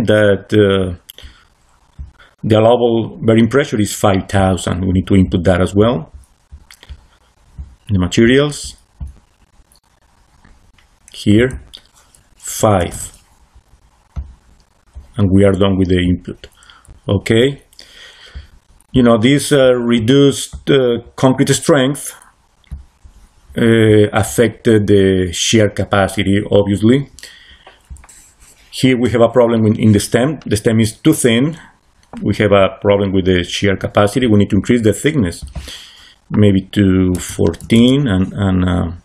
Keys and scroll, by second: 12.7 5, 12.8 Return, 37.0 1, 37.5 4, 37.7 Return.